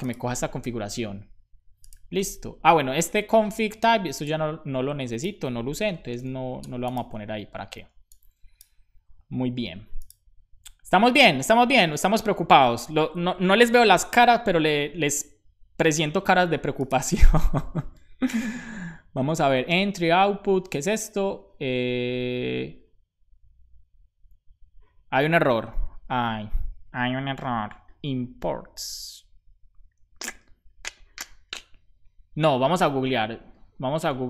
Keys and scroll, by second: 2.3 super+Right, 5.8 BackSpace, 6.1 super+s.